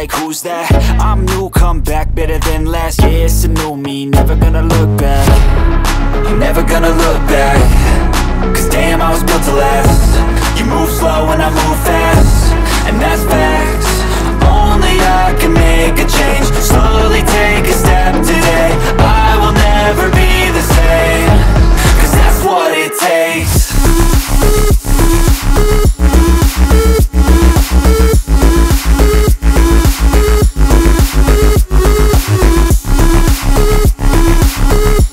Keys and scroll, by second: 0.9 v, 17.9 Return, 19.4 super+z, 32.1 Return.